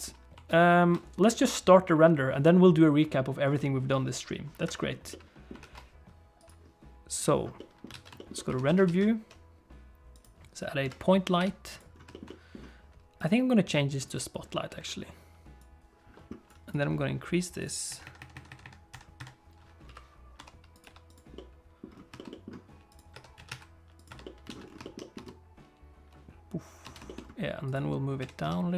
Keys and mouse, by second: 0.5 ctrl+s, 5.1 middle click, 5.6 ctrl+s, 7.5 click, 7.9 alt+a, 8.1 shift+click, 8.3 shift+click, 8.6 ctrl+s, 8.8 shift+a, 10.8 KP_3, 11.4 g, 12.1 shift+middle click, 12.2 middle click, 14.0 click, 15.6 click, 16.6-17.6 drag, 18.0 shift+click, 18.5 shift+click, 19.8 KP_3, 20.4 r, 20.8 g, 21.3 middle click, 22.2 shift+middle click, 22.3 middle click, 22.9 click, 23.1 Tab, 23.3 a, 23.5 s, 24.1 Tab, 24.2 alt+middle click, 24.5 alt+a, 24.8 shift+middle click, 25.0 middle click, 25.1 space, 26.8 space, 27.0 shift+middle click, 28.2 g.